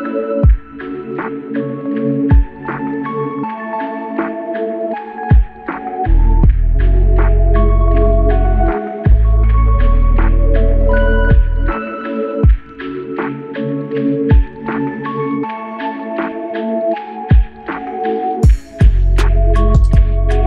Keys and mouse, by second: 1.5-3.4 typing, 5.6 double click, 10.7 double click, 13.7 double click, 15.6 double click.